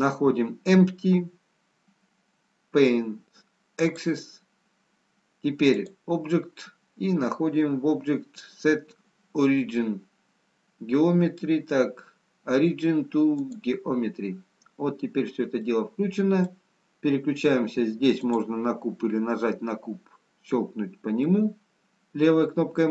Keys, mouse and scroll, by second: 5.6 click, 15.6 middle click, 18.7 click, 21.6 middle click.